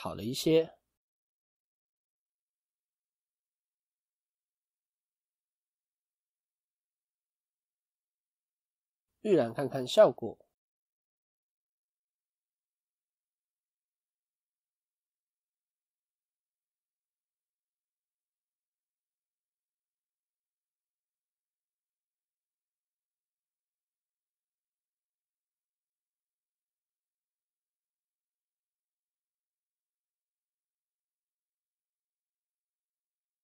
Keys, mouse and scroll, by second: 7.2 scroll down 3, 9.4 click, 19.1 scroll up 1, 20.9 n.